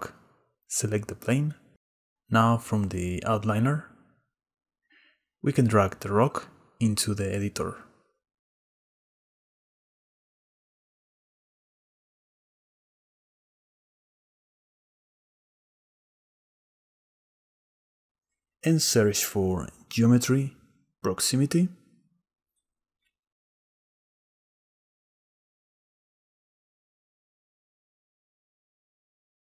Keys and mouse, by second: 0.4 click, 2.8 click, 6.0 click, 8.2 click, 11.9-14.0 drag, 14.6 click, 15.6 click, 18.2 click, 18.9 shift+a, 25.0 click, 25.7 click, 28.5 click.